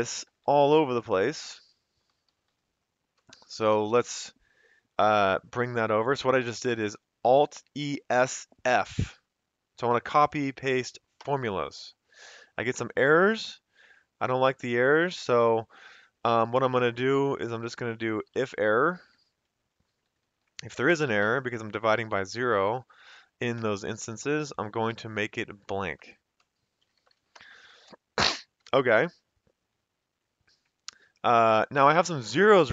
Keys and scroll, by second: 0.2 shift+Right, 1.4 shift+Down, 3.3-4.3 typing, 11.2 Return, 13.2 F2, 14.2 Escape, 16.2 F2, 16.9 Left, 17.1 Left, 17.3 Left, 17.6 Left, 18.0-19.2 typing, 19.8 Right, 20.0 Right, 20.2 Right, 20.4 Right, 21.0-23.1 typing, 23.6 Return, 24.2 Up, 24.9 ctrl+c, 26.5-27.5 typing, 28.6 Escape.